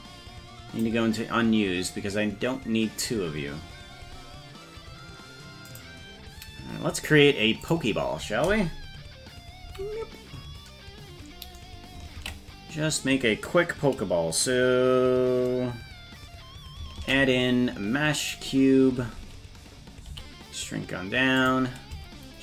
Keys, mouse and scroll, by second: 1.0-1.3 scroll down 2, 3.7-5.3 scroll up 5, 5.3-5.8 scroll up 3, 5.8-7.0 right drag, 7.0-7.4 scroll up 2, 7.7 click, 9.6 KP_Decimal, 12.4 ctrl+s, 17.0 shift+a, 20.1 s.